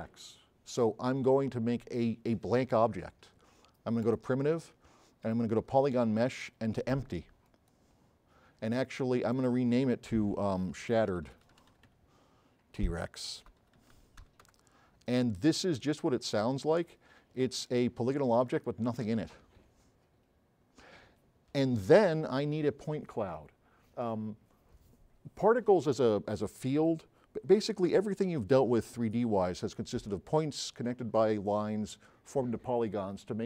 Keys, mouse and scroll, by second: 4.1-5.2 drag, 10.5-14.9 typing, 16.3 click, 17.7 click.